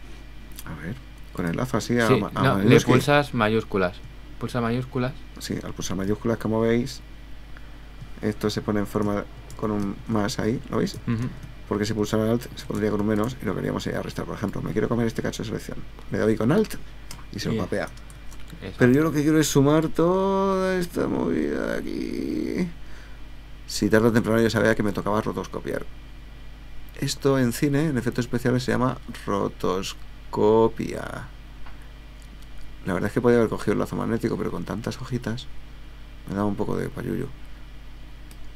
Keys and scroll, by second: 18.2 super+z.